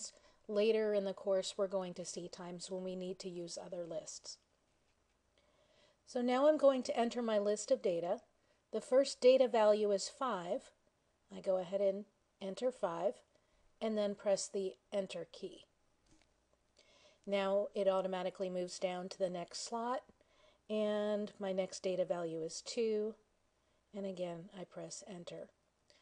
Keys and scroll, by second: 11.3 5, 15.0 Return, 22.6 2, 24.5 Return.